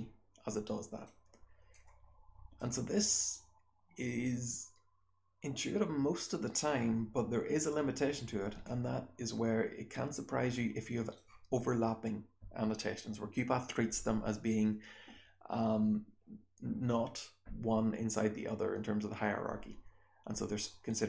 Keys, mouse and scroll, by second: 1.7-2.6 drag, 4.2-6.6 drag, 8.6-11.1 drag.